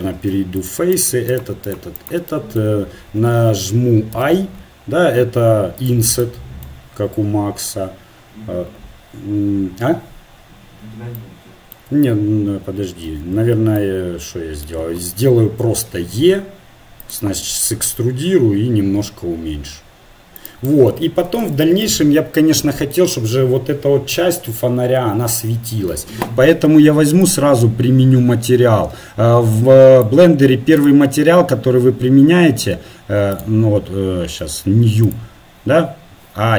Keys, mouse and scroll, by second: 2.3-3.5 middle drag, 5.8 i, 11.2-12.7 middle drag, 13.1 ctrl+z, 13.8-15.7 middle drag, 15.7 e, 17.6 s, 30.8-36.5 drag.